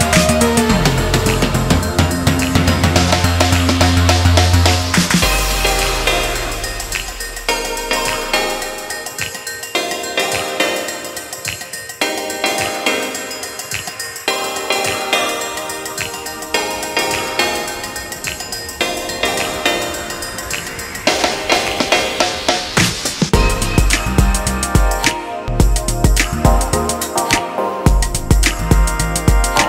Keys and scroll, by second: 2.5 f, 3.2 f.